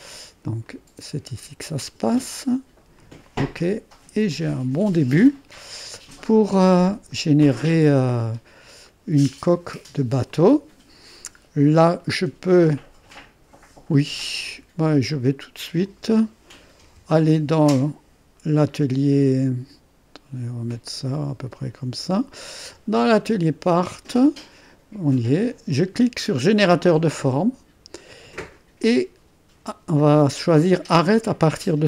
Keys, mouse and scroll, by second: 0.7 click, 1.9 click, 3.0 click, 4.3 click, 5.9 click, 8.2-8.9 scroll up 1, 9.6 right click, 11.1 click, 11.5-12.9 middle drag, 14.1 click, 15.4 middle click, 16.9 1, 18.7-19.4 typing, 20.6-22.8 drag, 26.7-27.7 drag.